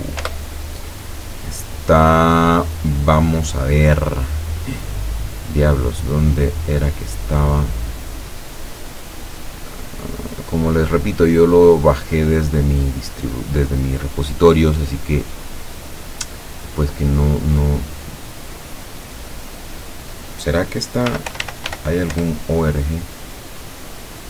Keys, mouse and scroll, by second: 0.0-0.1 typing, 0.6 Return, 5.3-5.6 scroll down 2, 7.4 scroll down 2, 8.1-8.8 scroll up 2, 19.5 click, 20.9-22.2 typing.